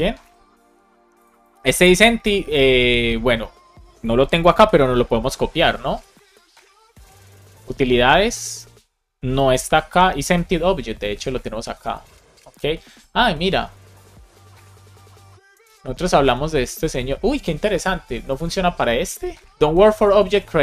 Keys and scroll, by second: 0.1 Escape, 4.5 shift+super+e.